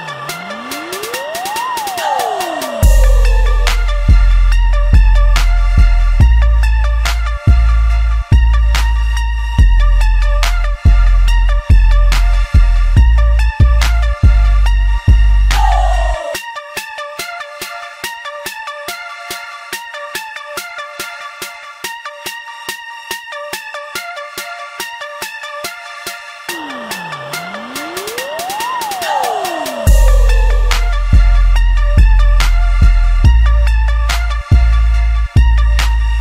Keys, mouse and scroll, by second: 2.2 click, 2.7 click, 3.3 middle click, 3.7 e, 5.7 click, 6.1 shift+middle click, 6.5 e, 9.5 click, 10.4 shift+click, 11.0 middle click, 11.5 ctrl+b, 17.3 click, 17.8 middle click, 18.3 shift+click, 18.7 middle click, 19.2 ctrl+b, 20.6 middle click, 21.4 ctrl+r, 22.0 right click, 22.8 ctrl+r, 25.5 ctrl+r, 27.6-30.3 middle drag, 30.3 ctrl+r, 34.5 ctrl+r.